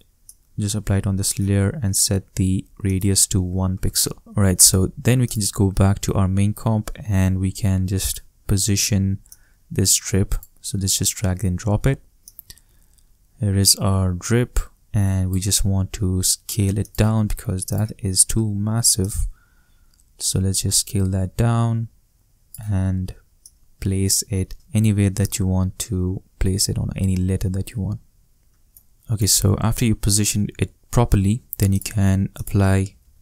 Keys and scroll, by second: 3.3 shift+i, 3.8 shift+Return, 32.6-33.2 typing.